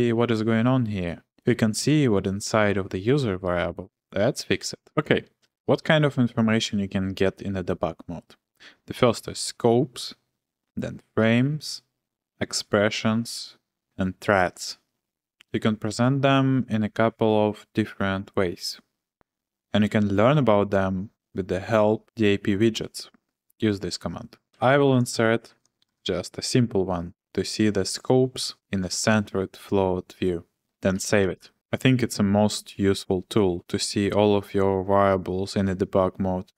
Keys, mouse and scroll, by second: 1.3 typing, 9.2 Return, 9.2 typing, 10.8-13.1 typing, 14.2 j, 14.6 k, 24.5 typing, 25.9 shift+v, 30.7-31.9 typing.